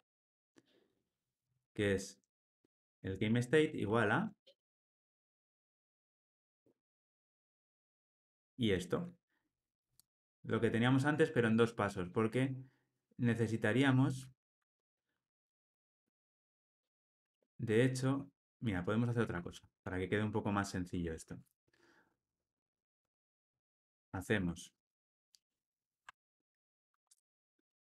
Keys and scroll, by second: 8.3 alt+shift+Left, 12.3 alt+super+l, 19.2 super+z, 19.9 super+z, 20.7 super+z, 23.0 super+z, 23.7 super+z, 24.3 super+z.